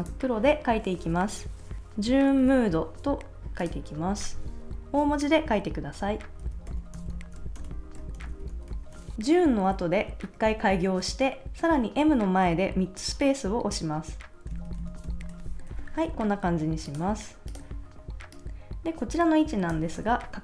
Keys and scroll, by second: 6.2-9.2 typing, 14.5 space.